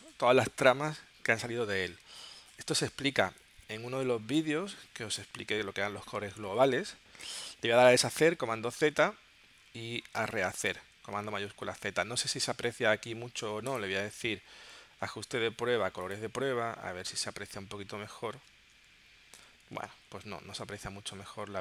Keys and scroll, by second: 8.2 super+z, 10.2 space, 11.4 shift+super+z, 17.4 super+z, 18.8 shift+super+z, 19.9 super+z, 20.8 shift+super+z.